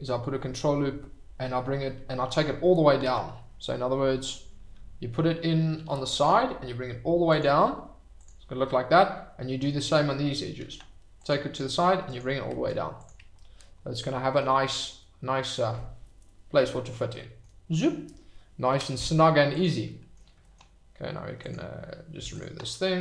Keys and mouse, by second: 2.5 Escape, 3.0 ctrl+z, 4.2 click, 5.7 ctrl+r, 7.3 click, 8.7 click, 8.8 middle click, 10.6 ctrl+r, 12.0 click, 12.5 Tab, 13.9-14.3 middle drag, 15.0-15.5 middle drag, 17.1 middle drag, 19.6 drag, 19.8 middle drag, 21.4 click, 22.1 x.